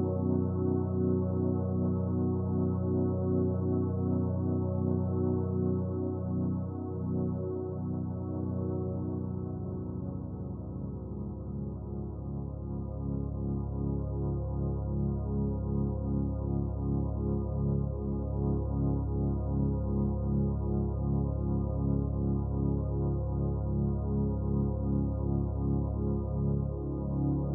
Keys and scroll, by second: 16.1 ctrl+t.